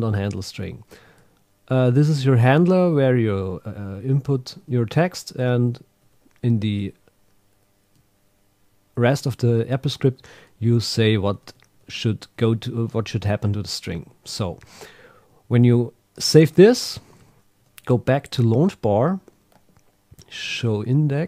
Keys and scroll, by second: 0.2 Up, 2.4 Right, 4.6 shift+Down, 5.1 shift+super+Right, 5.7 Left, 6.0 Down, 6.6 shift+super+Right, 11.1 Left, 11.3 Right, 12.3 Left, 16.4 super+q, 17.2 super+Tab, 17.6 super+Right.